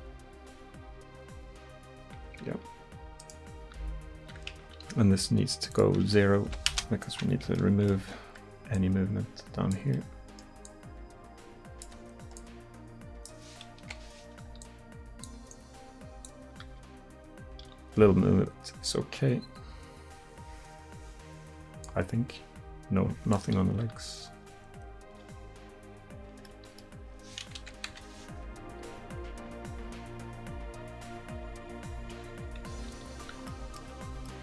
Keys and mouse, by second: 2.3-3.2 middle drag, 3.2-3.8 right drag, 3.8 r, 10.1-13.9 middle drag, 13.9 KP_1, 16.7 r, 21.9-23.8 drag, 23.8 r, 26.5-27.6 drag, 27.6 KP_1, 27.9 KP_3, 28.7 r, 33.0-34.4 middle drag.